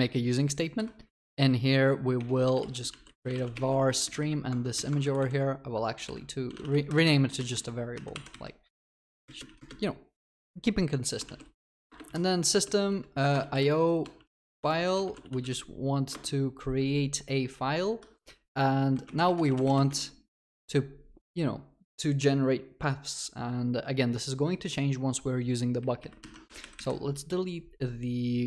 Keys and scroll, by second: 0.8 Escape, 2.1 ctrl+BackSpace, 11.9 Return, 17.9 Escape, 26.5 ctrl+y.